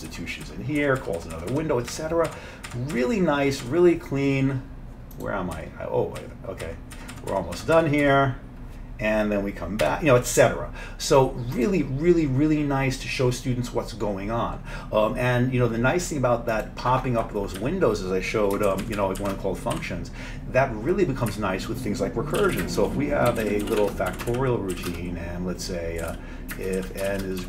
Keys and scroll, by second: 0.5 F7, 0.9 F7, 1.4 F7, 1.6 F7, 2.3 F7, 2.7 F7, 3.7 F7, 5.6 F7, 6.2 F7, 7.0-7.8 F7, 9.9 F7, 17.6 Down, 18.7 shift+Down, 18.9 shift+Down, 19.0 shift+Down, 19.2 shift+Down, 19.8 Delete, 21.4 Up, 22.2-27.4 typing.